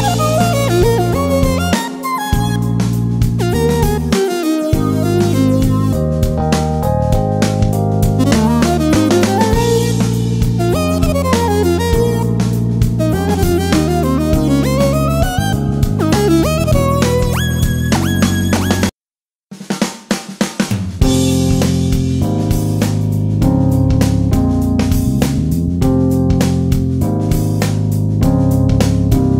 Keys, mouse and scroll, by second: 0.2-5.2 alt+drag, 5.2-7.8 drag, 15.0 ctrl+d, 20.2 click, 24.5 click, 25.4 Delete, 26.7-29.3 drag.